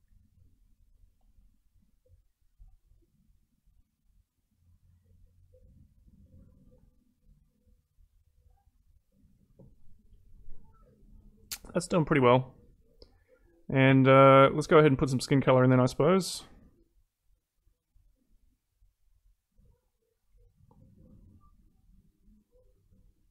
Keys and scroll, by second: 6.7 ctrl+z.